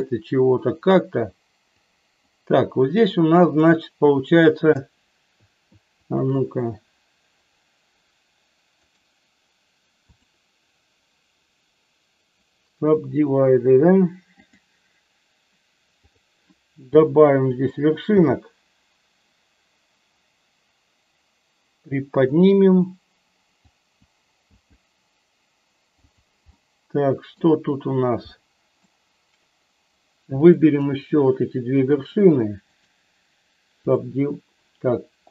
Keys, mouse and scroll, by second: 1.9 click, 3.3 click, 6.0 shift+click, 8.7-10.2 right drag, 14.4 click, 18.1 g, 23.7 click, 24.4 g, 26.0 click, 26.5 middle click, 28.4 middle click, 30.2 click, 31.9 shift+click, 32.9-34.1 right drag.